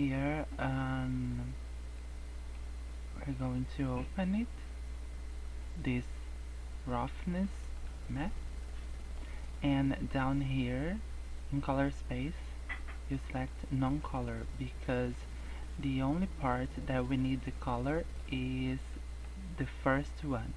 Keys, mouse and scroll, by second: 0.1 scroll up 3, 1.9 middle click, 3.3 click, 8.2 scroll down 4, 8.3 middle click, 9.6 scroll up 3, 11.7 click, 13.7 scroll down 2, 13.9 middle click, 14.5-15.1 scroll up 3, 15.8-16.4 scroll down 3, 16.5 scroll up 1, 17.1 middle click, 17.7 middle click, 18.6 scroll down 2, 18.9 middle click.